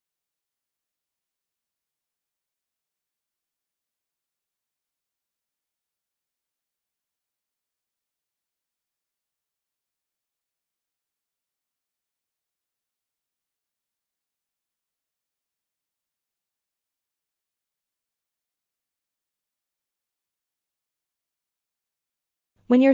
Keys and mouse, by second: 0.8 l, 1.6 s, 2.4 click, 4.2 click, 5.1 l, 5.7 s, 6.3-8.7 drag, 8.9 g, 9.4-10.4 drag, 12.0 l, 13.8 s, 14.7-16.5 drag, 16.6 g, 17.1-18.8 drag, 22.6 Tab.